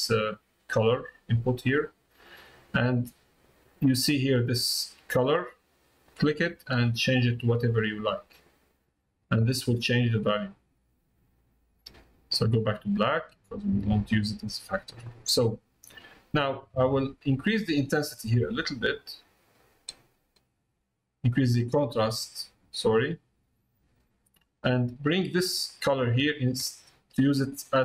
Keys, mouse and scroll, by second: 0.1-1.8 drag, 9.6 middle click, 11.9 click, 14.8 middle click, 15.3 click, 16.9-18.1 drag, 18.8-21.0 drag, 21.8-23.2 drag, 23.5 middle click, 24.2 middle click, 25.6-27.8 drag.